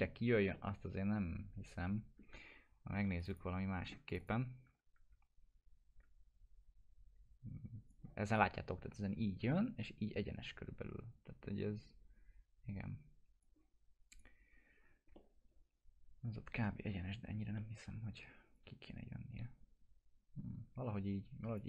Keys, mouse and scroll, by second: 0.0 scroll down 1, 0.5-2.4 alt+middle drag, 3.2 click, 3.4 Right, 4.1 click, 7.9-8.5 drag, 13.4-14.4 drag, 15.1-17.0 alt+middle drag, 17.2 scroll up 1, 17.5-18.2 alt+middle click, 18.5-20.7 drag.